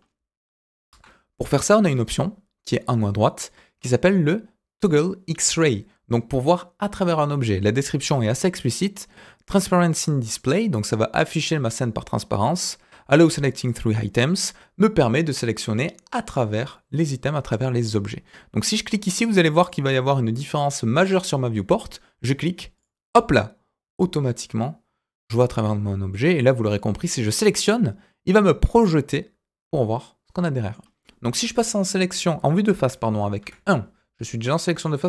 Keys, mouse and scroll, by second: 0.9 KP_1, 1.8 click, 18.8-19.2 scroll up 2, 19.2 middle click, 22.7 click, 26.1 click, 27.1 scroll down 2, 27.4-30.8 middle drag, 33.4 KP_1, 34.7 click.